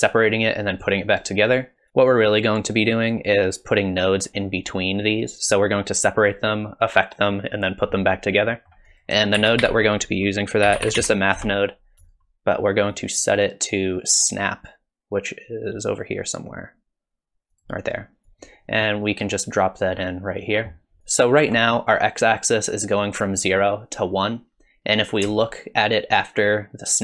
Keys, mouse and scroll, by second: 8.5 middle click, 8.9 click, 9.4 shift+a, 12.9 click, 18.3 click, 21.1 ctrl+shift+click.